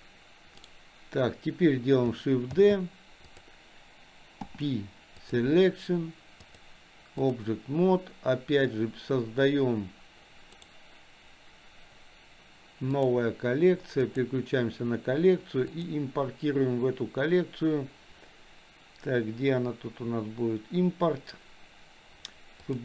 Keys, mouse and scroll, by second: 2.6 shift+d, 4.4 p, 6.5-7.5 drag, 10.5-13.2 right drag, 15.8-22.8 drag.